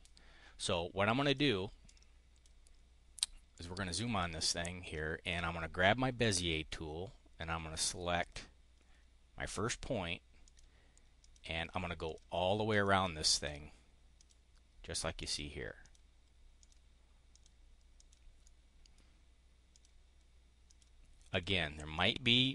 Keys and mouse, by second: 1.2 click, 1.8 click, 3.4 click, 6.1 click, 8.1 click, 9.4 click, 10.4 click, 11.1 click, 12.0 click, 12.6 click, 13.3 click, 14.0 click, 15.1 click, 15.8 click, 16.5 click, 17.2 click, 17.9 click, 18.3 click, 19.6 click, 20.6 click, 21.2 click, 21.8 click.